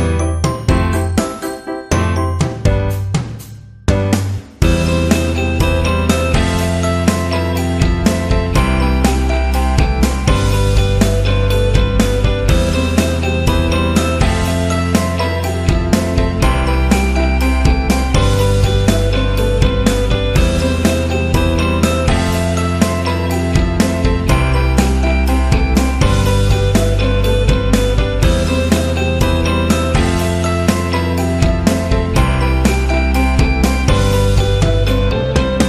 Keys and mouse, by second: 1.7 g, 2.5 alt+z, 2.8 KP_1, 3.7 s, 5.1 KP_3, 5.9 middle click, 7.2 right click, 8.7 KP_3, 8.7 e, 9.9 r, 10.9 g, 12.1 KP_1, 12.6 Tab, 13.3-14.4 middle drag, 14.9 Tab, 15.2 middle click, 16.6 middle click, 17.4 right click, 17.7 middle click, 18.9 middle click, 19.7 middle click, 20.4 ctrl+r, 22.9 middle click, 23.6 middle click, 25.6 middle click, 27.4 right click, 27.7 middle click, 30.0 right click, 30.6 g, 32.6 middle click, 33.6 g, 34.6 right click, 35.2 right click, 35.5 KP_3.